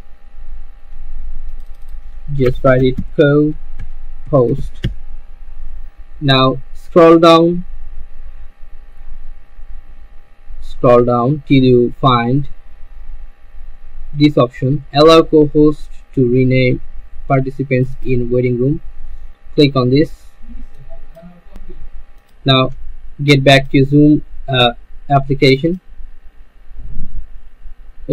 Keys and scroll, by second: 2.4-5.2 typing.